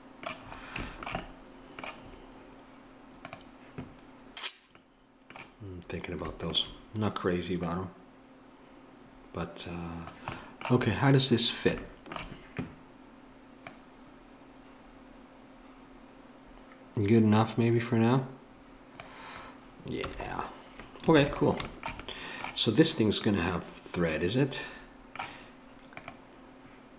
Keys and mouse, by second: 3.2-10.1 drag, 13.7-19.0 drag, 20.1 a, 21.1 ctrl+s.